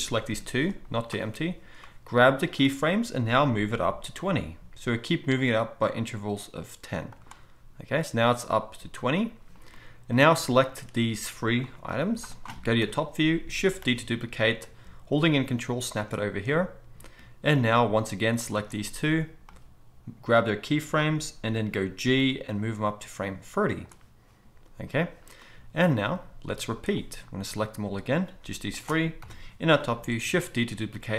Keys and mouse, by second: 0.3 g, 1.8-7.3 drag, 4.1 g, 7.3-10.6 middle drag, 10.6-16.0 drag, 11.8 g, 12.8 KP_7, 13.9 shift+d, 16.0-17.5 ctrl+middle drag, 17.5 click, 17.7-19.4 middle drag, 19.4-23.8 drag, 22.0 g, 23.8-26.9 middle drag, 26.9-31.1 drag, 28.4 g, 29.2 KP_7, 30.5 shift+d.